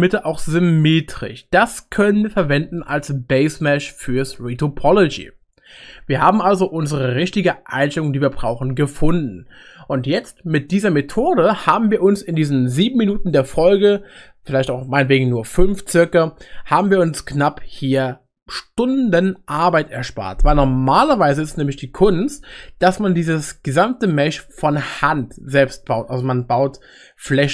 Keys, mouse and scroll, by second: 4.4 middle click.